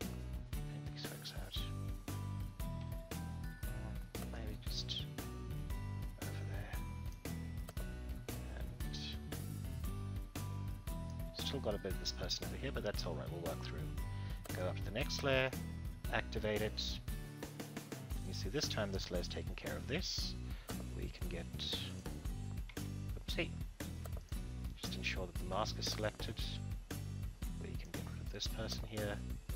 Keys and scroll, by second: 2.8 ctrl+z, 22.8 ctrl+z.